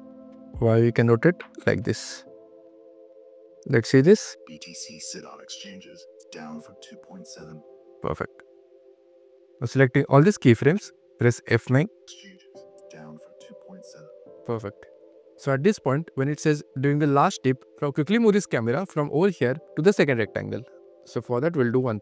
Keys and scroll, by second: 4.2 space, 4.8 q, 7.5 space, 8.1 q, 11.7 F9, 12.0 q, 14.1 space, 14.3 q.